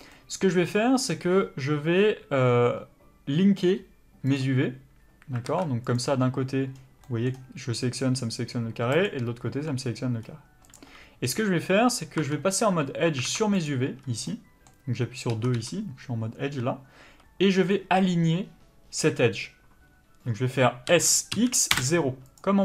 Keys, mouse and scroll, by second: 5.4 alt+a, 5.8 click, 12.2 2, 13.2 alt+a, 13.6 click, 20.9 s.